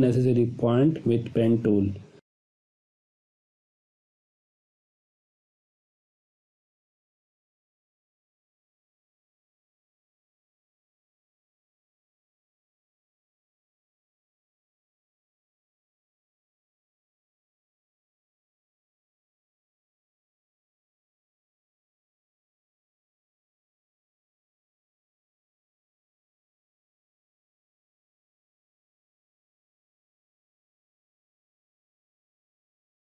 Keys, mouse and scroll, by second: 0.0 Delete, 0.6 space, 0.8 ctrl+click, 2.3-3.0 ctrl+drag, 4.3 Delete, 5.1 space, 5.4 ctrl+click, 6.7-7.6 ctrl+click, 7.3-8.5 ctrl+drag, 9.0 Delete, 10.3 click, 10.6 Delete, 11.2 click, 11.4 space, 11.6 ctrl+click, 13.5 click, 13.6-14.2 ctrl+click, 14.2 ctrl+z, 14.5 click, 17.0 click, 19.6 click, 22.4 click, 25.3-27.5 drag, 29.5 space, 29.7 ctrl+click, 30.7 ctrl+alt+click, 32.5 drag.